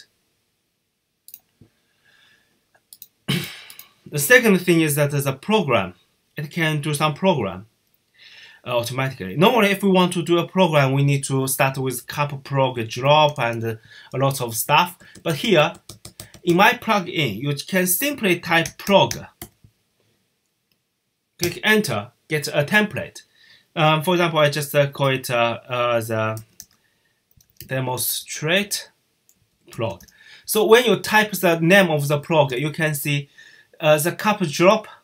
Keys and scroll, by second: 10.6-16.1 typing, 18.2-19.7 typing, 26.0-32.7 typing.